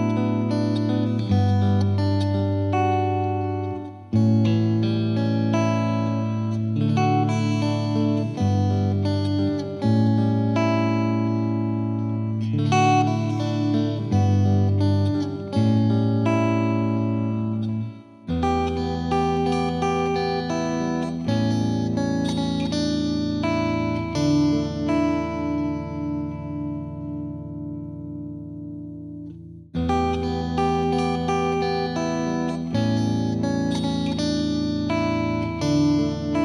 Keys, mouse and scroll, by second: 1.9 ctrl+s, 4.4 middle click, 4.7 KP_1, 4.9 shift+middle click, 5.1 space, 5.6-6.8 middle drag, 7.0 space, 7.5-8.5 drag, 8.7 middle drag, 8.9 click, 9.0 click, 9.7-10.3 scroll down 10, 10.3-11.3 scroll up 11, 11.3 click, 11.4-12.1 scroll down 10, 12.5 scroll up 3, 13.0 scroll down 8, 14.1 click, 15.0 scroll up 10, 16.2 click, 16.4 click, 16.8-17.7 scroll down 3, 18.0-19.7 drag, 24.5-26.4 drag, 27.0-28.5 drag, 28.6 click, 29.3 space, 31.1 space, 31.4 space, 31.6 middle click, 31.8 scroll up 3, 31.9-32.8 middle drag, 32.8 scroll down 2, 33.0 middle drag, 33.3 click, 33.8 scroll down 1, 34.0 click, 34.4-34.9 scroll down 3, 35.1-36.4 scroll down 19.